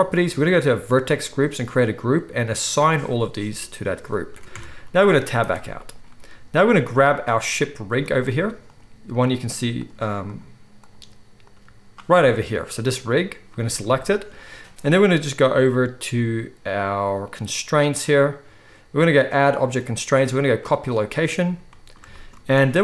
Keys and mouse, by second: 4.5 Tab, 4.5-6.8 middle drag, 4.9 z, 6.8 right click, 7.3 middle click, 7.4-8.7 right drag, 7.9 z, 8.7-9.8 middle drag, 9.8 right click, 10.2 middle click, 10.3-13.0 right drag, 10.8 click, 10.8-22.8 middle drag, 11.4 click, 14.7-18.3 drag, 14.7-18.3 right drag, 22.3 z.